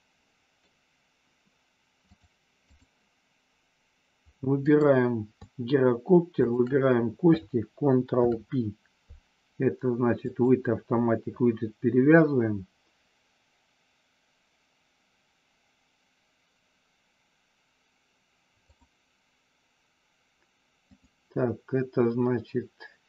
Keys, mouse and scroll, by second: 2.0 click, 4.7 click, 6.3 shift+click, 8.1 ctrl+p, 20.9-22.9 drag.